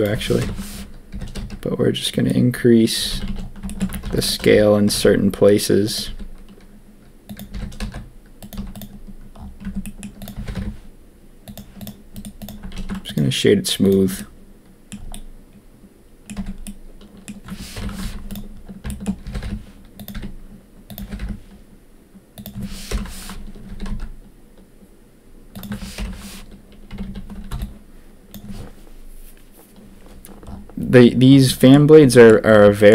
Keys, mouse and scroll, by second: 0.4 ctrl+KP_1, 1.1 g, 3.1 a, 3.2 a, 3.6 shift+click, 4.0 ctrl+r, 4.5 g, 6.0 s, 7.5 g, 8.5 z, 9.6 Tab, 9.8 click, 10.2 click, 10.3 g, 11.7 click, 12.1 click, 12.7 ctrl+a, 13.8 click, 14.1 drag, 14.4-14.9 middle drag, 15.1-16.2 drag, 16.2 middle click, 16.3 Tab, 16.6 click, 17.7 ctrl+KP_3, 18.0 z, 19.2 g, 20.1 s, 21.0 g, 22.9 ctrl+KP_1, 23.6 s, 26.0 ctrl+KP_3, 26.9 a, 27.0 a, 27.5 b, 32.7 shift+click.